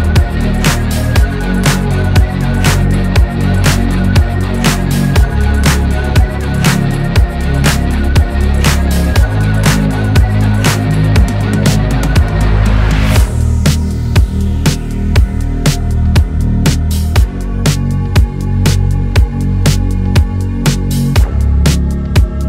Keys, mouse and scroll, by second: 1.7-2.2 alt+scroll up 1, 3.0-5.4 shift+drag, 7.5 space, 7.7-8.9 click, 8.1 space, 8.9 space, 9.3 click, 9.9-10.3 scroll up 1, 11.0-11.9 alt+scroll up 2, 11.9-13.2 scroll up 1, 13.2 scroll up 1, 13.9 click, 14.4 alt+scroll down 1, 14.8 v, 15.3-15.6 alt+scroll down 1, 18.3 click, 19.9-20.3 alt+scroll up 1, 21.9-22.4 drag.